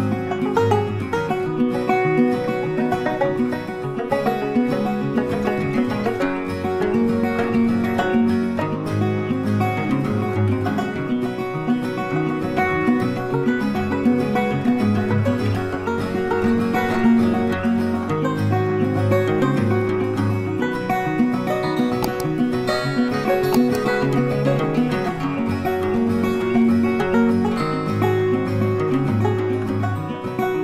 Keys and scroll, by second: 6.5 Delete, 7.8 ctrl+d, 12.2 ctrl+t.